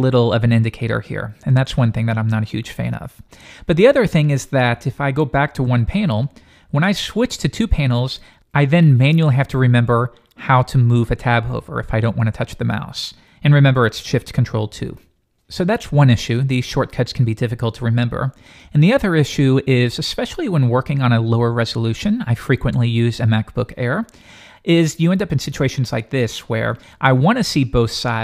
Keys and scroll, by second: 0.6 ctrl+2, 0.9 ctrl+1, 5.5 alt+super+1, 7.5 alt+super+2, 14.7 ctrl+shift+2.